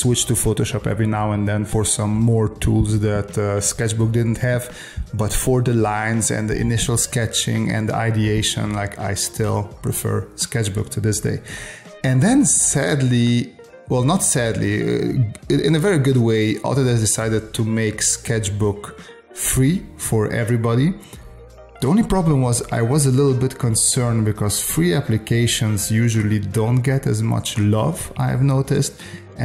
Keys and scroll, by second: 0.6 space, 1.7 space, 5.1 space, 7.5 space, 8.9 space, 10.2 space, 11.7 space, 14.9 space, 16.0 space, 18.1 space, 19.3 space, 21.0 space, 22.2 space, 25.1 space, 27.4 s, 27.7 space, 28.5 space, 29.2 space.